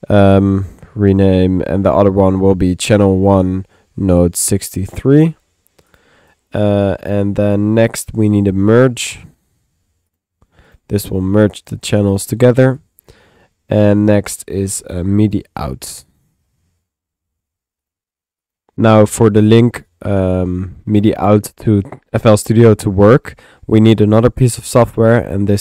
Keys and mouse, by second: 0.0 Tab, 0.3 typing, 1.8 click, 2.4 click, 6.3 click, 7.1 middle click, 7.9-9.0 drag, 8.5 Tab, 9.0-10.7 typing, 10.2 click, 10.7 click, 11.4 click, 12.7 click, 13.9-15.1 drag, 14.8 Tab, 16.8-17.6 typing, 17.9 click.